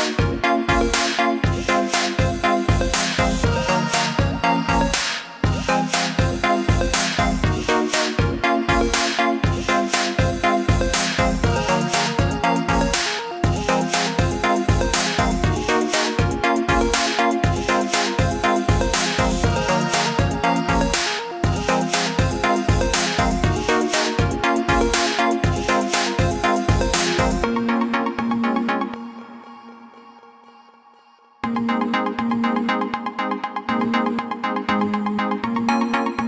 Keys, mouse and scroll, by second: 4.5 ctrl+z, 7.3 click, 9.0-9.8 alt+scroll up 2, 9.8 click, 13.0 alt+scroll up 1, 14.5 click, 19.8 alt+scroll down 1, 20.8 alt+scroll down 1, 21.6 click, 32.9 click, 34.4 alt+scroll up 1.